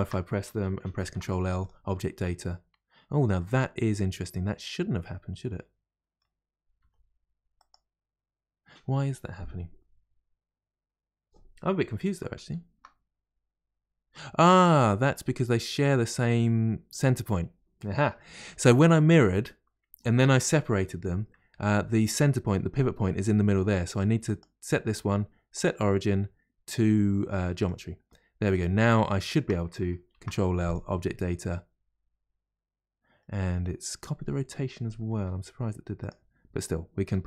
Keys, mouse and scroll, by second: 1.0 ctrl+l, 1.6 ctrl+l, 3.0-3.4 scroll down 1, 3.4-6.4 middle drag, 6.8 g, 6.8 g, 12.4 ctrl+z, 14.6-15.1 scroll up 1, 15.1 middle click, 15.8 click, 23.9 click, 24.2-27.6 right drag, 28.5 click, 29.2 shift+click, 30.1 ctrl+l, 30.7 ctrl+l, 33.2-35.2 middle drag, 35.2 r, 36.6 click, 37.0 r.